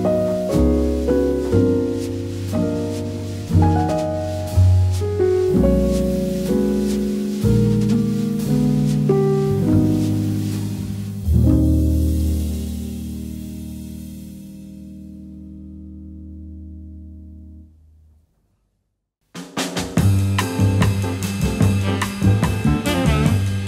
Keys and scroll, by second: 7.6 a, 11.1 v, 12.3 a, 17.2 shift+w.